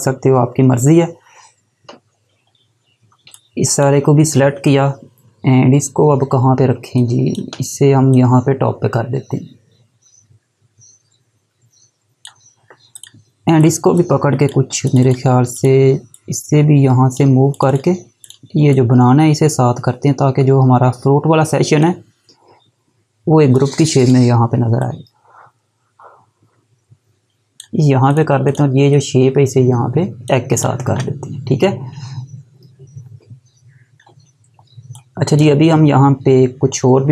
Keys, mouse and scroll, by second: 2.6 scroll down 1, 3.3 click, 6.7 space, 6.9 click, 7.2 space, 8.1 click, 16.1 click, 33.5 scroll down 1, 34.5 space, 34.9 click, 35.0 space.